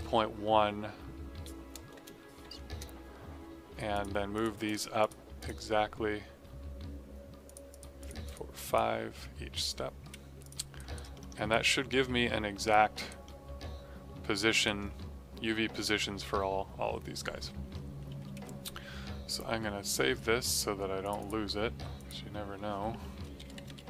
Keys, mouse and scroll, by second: 1.9 BackSpace, 2.4 KP_1, 2.7 KP_Enter, 3.9 click, 10.7 alt+right click, 11.1 alt+middle click, 11.2 alt+scroll, 11.4 alt+right click, 11.8 alt+middle click, 12.6 right click, 13.2 middle click, 17.9 ctrl+Num_Lock, 18.1 s, 19.8 click, 22.8-23.8 typing.